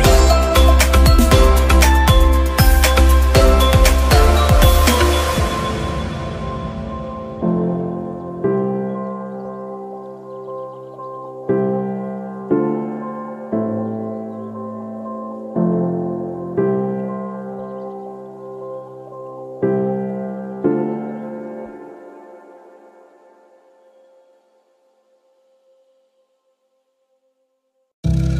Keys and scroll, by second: 10.2 ], 13.4 ], 14.0 ], 16.1 [, 18.5 [, 19.2 [, 21.7 [.